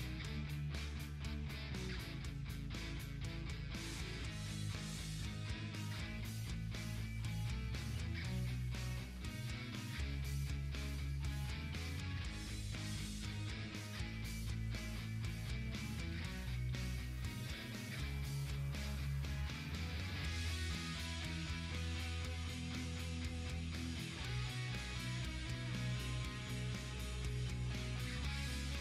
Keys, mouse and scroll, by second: 0.0 ctrl+z, 1.1-2.3 drag, 2.3 ctrl+z, 3.6-11.8 drag, 11.8 click, 12.9 right click, 13.6 click, 14.5 right click, 15.7-20.8 drag, 23.8 click, 25.2 ctrl+d, 26.6-28.8 drag.